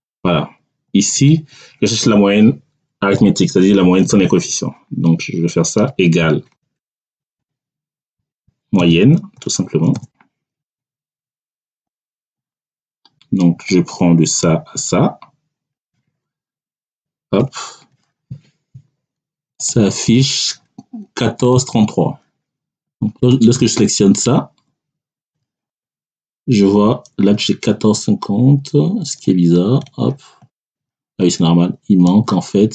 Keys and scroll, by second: 5.7-9.6 typing, 16.7 [, 17.3 Return.